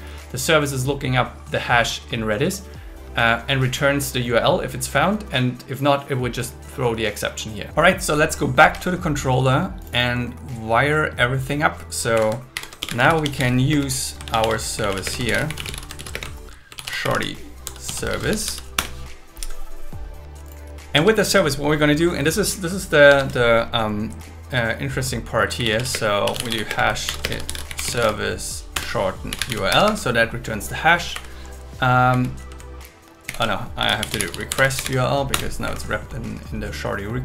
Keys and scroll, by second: 8.6 super+1, 12.1 Right, 12.5 shift+8, 14.1 space, 14.2 super+1, 15.0 space, 16.1 space, 16.8 shift+s, 18.1 shift+s, 18.8 Return, 21.0 Tab, 23.1 Tab, 25.9 space, 26.6 space, 27.0 shift+0, 27.2 space, 28.7 Return, 29.7 Escape, 31.1 Right, 32.1 Left, 33.3 alt+shift+Left, 34.0 alt+shift+Left, 35.3 Return, 35.6 Right.